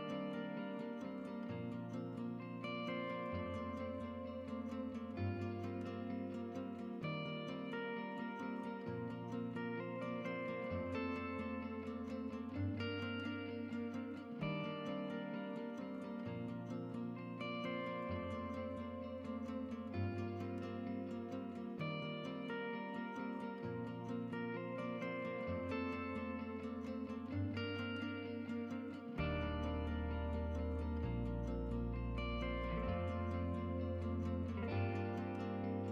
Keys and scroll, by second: 1.6-6.5 typing, 11.5-12.2 typing, 26.9-28.4 typing.